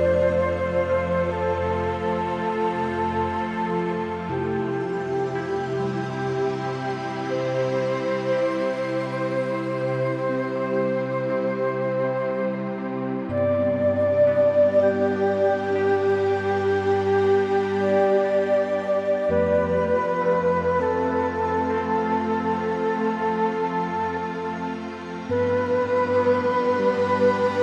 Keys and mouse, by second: 0.4 click, 1.6 g, 2.4 Escape, 2.7 o, 2.9 g, 5.6 y, 7.6 middle click, 8.5 `, 9.4 `, 10.3 `, 11.6 shift+middle click, 12.9 g, 13.7 y, 19.0 click, 19.4 Tab, 19.6 click, 20.7 click, 21.4 Tab, 21.7 click, 22.1 g, 22.3 y, 23.3 Escape, 23.7 o, 24.1 g, 25.8 y, 27.0 Tab, 27.5 middle click.